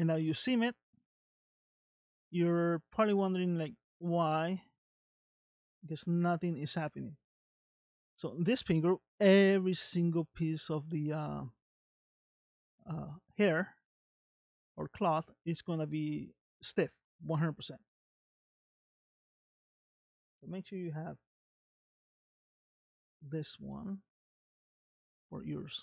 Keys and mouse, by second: 0.3 space, 0.9 space, 1.3 space, 2.7 space, 3.0 space, 3.6 middle click, 4.5 space, 4.6 middle click, 5.3 space, 5.9 space, 9.9 middle click, 14.3 middle click, 21.2-22.7 drag, 23.7 middle click, 24.3 space.